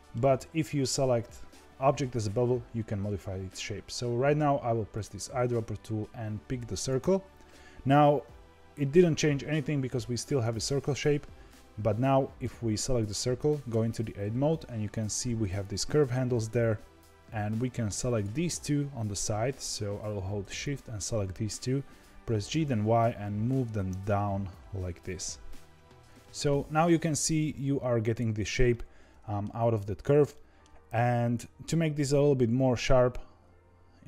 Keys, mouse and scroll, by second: 4.9 click, 10.2 click, 11.0-13.6 middle drag, 13.6 Tab, 14.8-15.3 scroll up 2, 15.3 shift+middle click, 15.9 scroll down 2, 18.0 click, 20.5 shift+click, 22.3 g, 26.1-33.4 middle drag.